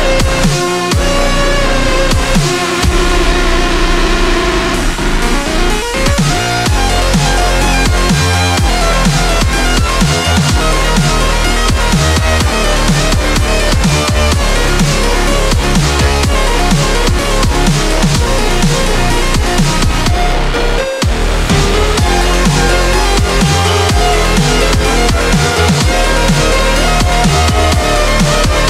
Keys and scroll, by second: 5.1 ctrl+z, 15.4 ctrl+z, 18.9 ctrl+z, 19.2 ctrl+z, 25.0 ctrl+z, 25.3-25.8 scroll down 2, 25.6 ctrl+z, 26.3-27.0 scroll up 2, 27.5 scroll down 1, 28.3 ctrl+z.